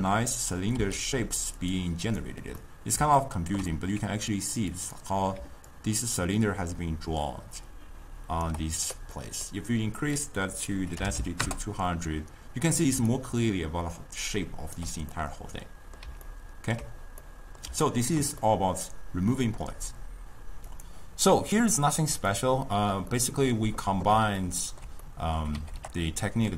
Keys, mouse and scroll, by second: 0.1-0.9 middle drag, 2.1 click, 2.6-4.8 middle drag, 4.8 click, 4.9-5.4 middle drag, 5.7-8.5 drag, 8.5 d, 9.2 middle click, 10.0-11.2 drag, 11.2 0, 13.0 d, 13.1-14.8 right drag, 14.8 d, 15.1-20.6 middle drag, 22.1 click, 23.2-25.6 middle drag, 25.6 g.